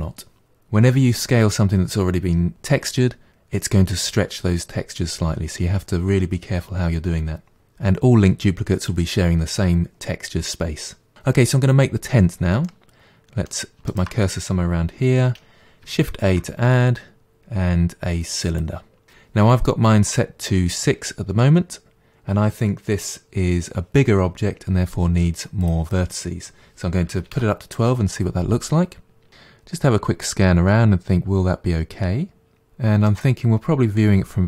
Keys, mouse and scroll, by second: 12.7-14.0 middle drag, 14.0-16.2 shift+right drag, 16.2 shift+a, 25.6-28.7 drag, 29.3-32.0 middle drag, 32.6-33.1 scroll down 3, 33.1-34.4 middle drag.